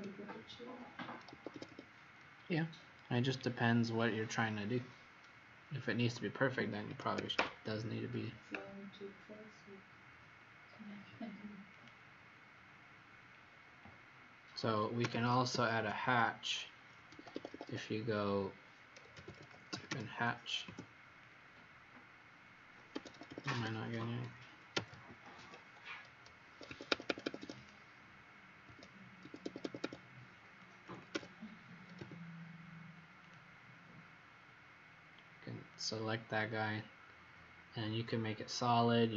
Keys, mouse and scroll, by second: 1.3 Escape, 1.4 Escape, 1.7 Escape, 2.3-2.8 scroll up 2, 3.6-5.1 scroll down 4, 6.2-6.8 scroll up 2, 6.8 Escape, 7.1 Escape, 7.7 Escape, 7.7-9.0 scroll down 1, 11.7 click, 13.4 scroll down 1, 14.8-16.2 typing, 17.1 Escape, 17.3 Escape, 17.6 Escape, 18.8-20.3 typing, 20.6 Return, 22.8 Escape, 23.1 Escape, 23.3 Escape, 24.4-25.3 typing, 26.4 Escape, 26.6 Escape, 27.0 Escape, 27.2 Escape, 27.5 click, 28.6 Escape, 28.6 click, 29.1 Escape, 31.1 h, 31.9 a, 33.1 click.